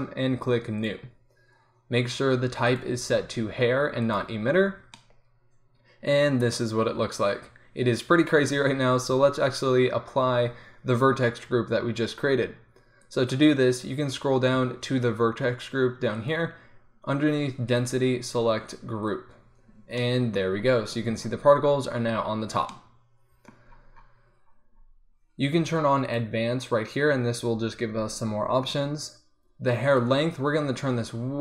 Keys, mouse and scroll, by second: 4.9 middle click, 7.4-13.0 middle drag, 22.4 middle click, 26.2-31.4 middle drag.